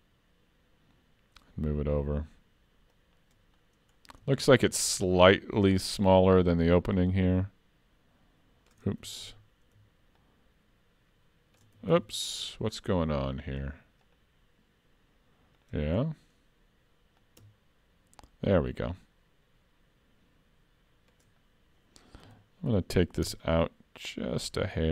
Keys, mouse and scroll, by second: 3.6-4.3 scroll up 5, 4.3 shift+middle click, 5.6 shift+click, 9.2 ctrl+z, 10.2 shift+click, 11.9 ctrl+z, 12.7-13.2 scroll down 5, 13.0-13.3 scroll up 5, 13.3-14.0 scroll down 2, 14.0 click, 16.0 scroll up 2, 17.2 click, 21.4-22.2 scroll up 1, 22.2 s.